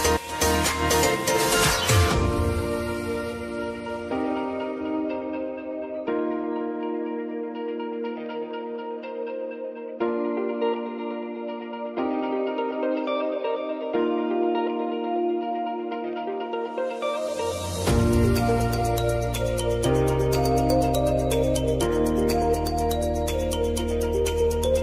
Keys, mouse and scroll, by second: 6.4 Return, 10.8 click, 11.4 typing, 14.9-16.4 typing, 18.3-22.9 drag, 22.9 ctrl+z, 24.1 click.